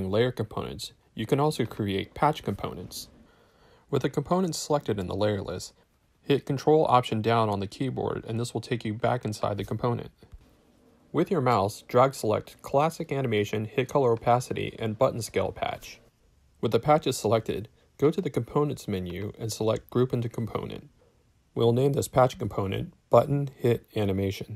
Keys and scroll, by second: 6.4 ctrl+alt+Down, 22.4-24.5 typing.